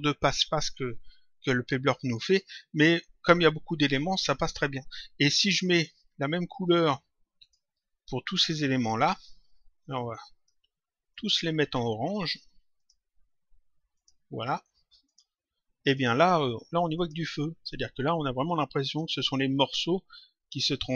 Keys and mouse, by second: 5.7 click, 6.6 ctrl+click, 8.9 click, 10.0 click, 12.7 click, 13.9 click.